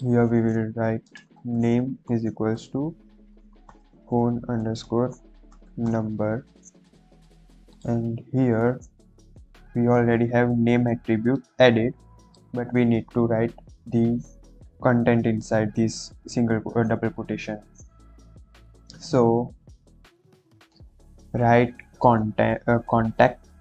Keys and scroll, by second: 1.0-5.8 typing.